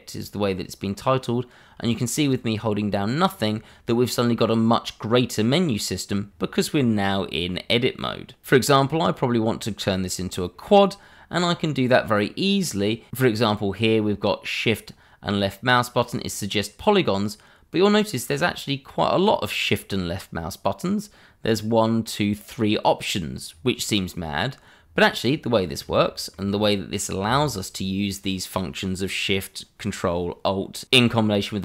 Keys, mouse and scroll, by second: 25.1-25.8 scroll up 1, 26.0 shift+middle click, 26.1 middle click, 26.2 shift+middle click, 26.4-28.5 shift+scroll up 2.